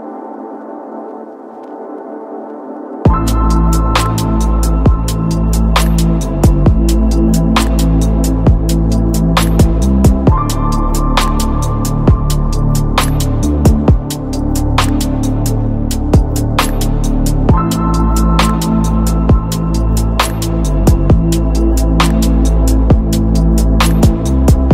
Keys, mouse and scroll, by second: 1.4-2.8 typing, 4.7-11.6 typing, 9.5 Return, 13.1 Down, 13.4 Return, 14.7-17.1 typing, 18.6 shift+., 18.9 t, 18.9 i, 19.1 m, 22.6 o, 22.8 u, 22.9 t, 24.0 >, 24.3 c, 24.5 o.